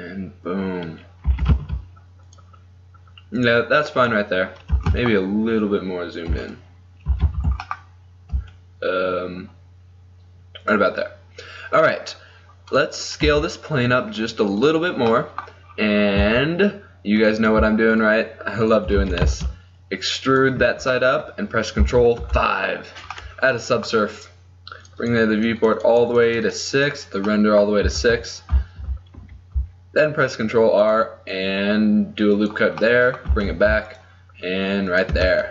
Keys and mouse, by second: 1.5 r, 3.6-6.4 drag, 4.9 g, 7.2 g, 13.1-15.2 middle drag, 13.3 s, 16.3 Tab, 19.1 e, 20.7 Tab, 22.4 ctrl+5, 24.9-29.3 drag, 28.0 Tab, 29.3 ctrl+r, 32.9 middle click, 33.6 ctrl+r, 35.3 Tab.